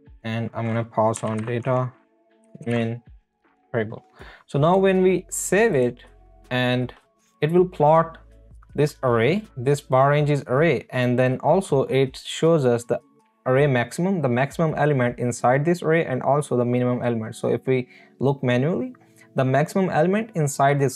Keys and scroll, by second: 0.1 Right, 0.9-3.5 typing, 3.4 Left.